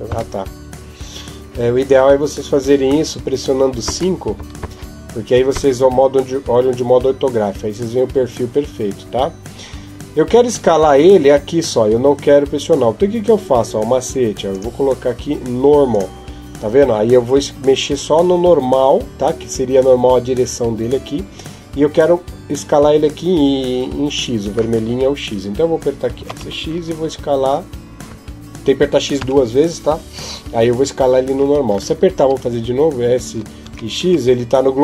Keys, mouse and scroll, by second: 1.4 KP_7, 2.7 KP_5, 3.6 KP_5, 14.3 click, 26.0 s, 33.4 s.